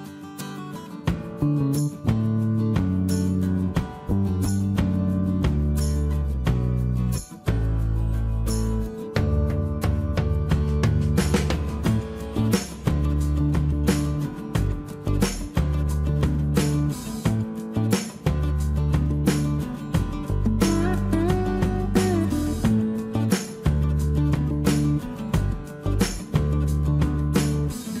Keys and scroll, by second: 1.8 space.